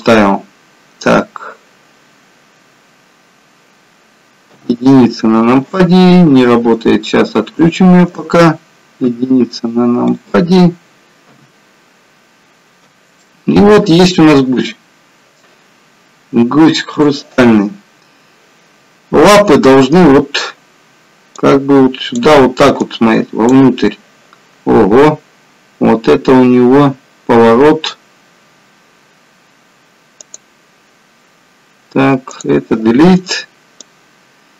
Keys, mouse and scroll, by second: 10.3 click, 11.4 KP_1, 12.5-12.9 scroll down 1, 13.3 shift+middle click.